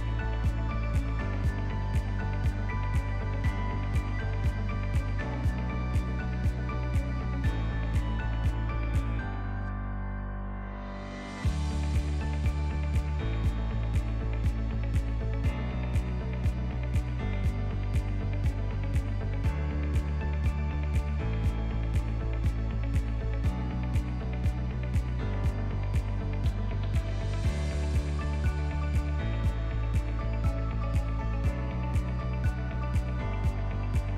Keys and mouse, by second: 0.2 Tab, 0.5 a, 1.4 KP_1, 2.2 ctrl+middle click, 2.8 shift+middle click, 3.8 s, 6.8 shift+middle click, 7.2 ctrl+middle click, 7.6 shift+middle click, 8.2 e, 15.9 ctrl+z, 16.6 alt+z, 17.0 shift+middle click, 18.0 right click, 18.9 Tab, 20.0 g, 22.8 g, 25.8 shift+middle click, 26.6 Tab, 27.7 1, 28.1 a, 29.4 e, 33.8 shift+middle click.